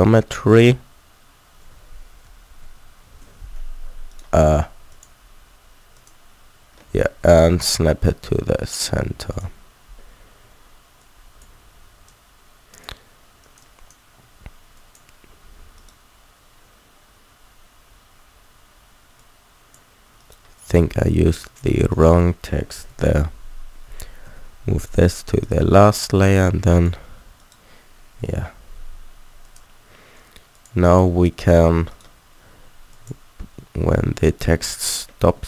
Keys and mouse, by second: 2.2 ctrl+z, 2.6 ctrl+z, 4.1 click, 4.9 middle click, 7.1 shift+s, 11.0-15.8 drag, 15.8-18.4 middle drag, 19.2-20.2 drag, 20.2-22.0 middle drag, 22.9 m, 23.7 click, 24.2 m, 26.7 click, 28.2 m, 29.1 click, 31.9-34.4 middle drag, 32.6 alt+a, 34.6 alt+a.